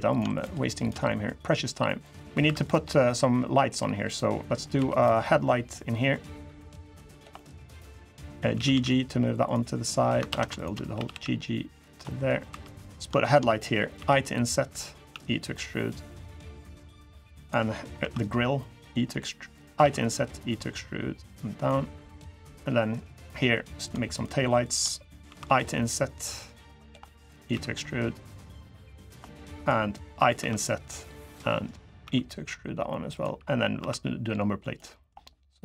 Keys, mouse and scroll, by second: 0.1 shift+click, 0.3 shift+click, 0.6 shift+click, 1.0 click, 2.0 middle click, 2.2 3, 2.4 click, 2.6 middle click, 3.8 click, 4.1 middle click, 4.5 2, 4.7 click, 5.0 middle click, 5.9 click, 7.1 middle click, 7.8 click, 8.3 g, 10.0 ctrl+z, 10.3 shift+click, 10.7 g, 11.8 middle click, 12.2 3, 12.6 click, 13.0 click, 13.3 middle click, 13.7 i, 14.9 e, 16.3 click, 17.2 click, 17.7 i, 19.6 e, 21.0 click, 22.2 middle click, 23.6 click, 23.9 shift+click, 24.4 click, 25.0 i, 26.8 middle click, 27.3 e, 29.0 middle click, 29.3 click, 30.1 i, 31.2 middle click, 31.4 scroll up 2, 31.8 e, 33.5 i, 34.6 middle click.